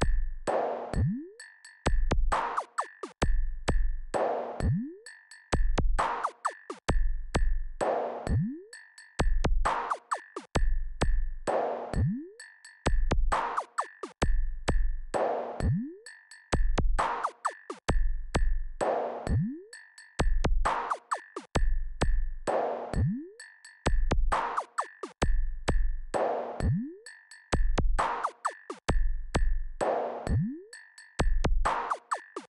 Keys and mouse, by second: 12.2-18.1 drag, 21.3-27.4 right drag.